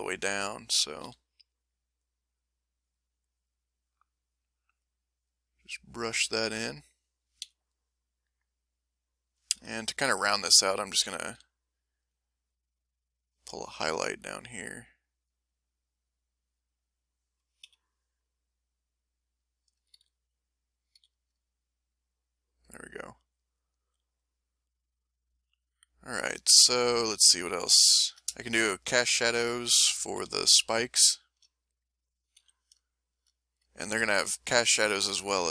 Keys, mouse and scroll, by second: 1.0 s, 1.3 middle click, 2.1 middle click, 2.7 click, 3.2 click, 3.7 click, 4.2 click, 4.6 click, 5.1-7.3 drag, 7.4 m, 7.6-9.6 drag, 9.6 m, 9.8 click, 11.3 s, 11.6 click, 13.0 click, 14.2 click, 15.1 click, 15.7 click, 16.4 middle click, 17.6 m, 17.8-20.0 drag, 19.9 ctrl+z, 20.9 ctrl+z, 21.4-26.5 ctrl+drag, 26.8-27.8 ctrl+middle drag, 28.1 ctrl+shift+middle click, 28.4 ctrl+shift+middle click, 28.9 ctrl+shift+click, 30.2 ctrl+s, 30.7 ctrl+middle click, 31.2 middle click, 32.4 m, 32.9-34.1 middle drag, 35.0 f.